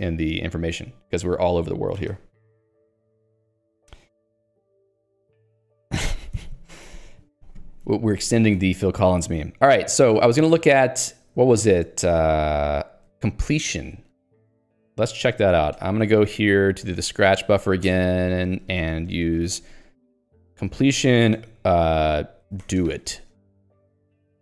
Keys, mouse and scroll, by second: 11.8 shift+g, 12.2 ctrl+u, 13.1 ctrl+d, 14.3 click, 16.7 click, 16.8 Escape, 17.3-24.4 typing, 17.9 Return, 23.5 Escape.